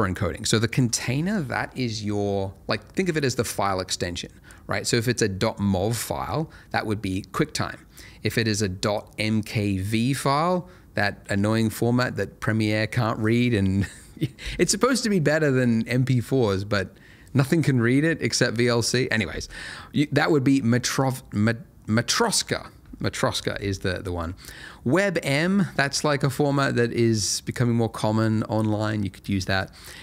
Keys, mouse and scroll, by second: 0.6 click.